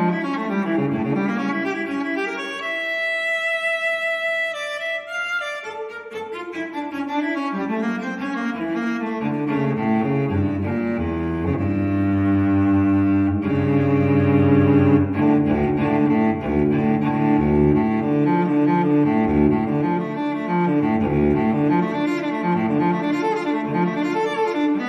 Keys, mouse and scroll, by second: 1.3 click, 2.9 scroll down 2, 3.2-4.4 scroll up 2, 4.4-5.4 scroll down 2, 5.4 scroll up 2, 5.6-6.4 scroll down 2, 6.8-7.4 scroll up 2, 8.6 click, 9.0 space, 9.7 click, 10.4 click, 13.1 click, 14.3 space, 16.8-17.1 scroll up 1, 17.8 click, 18.3 space, 19.0 click, 19.3 space, 20.2 click, 20.6 space, 21.0 click, 21.3 space, 22.1 scroll down 2, 23.2 click, 24.3-24.7 scroll down 2.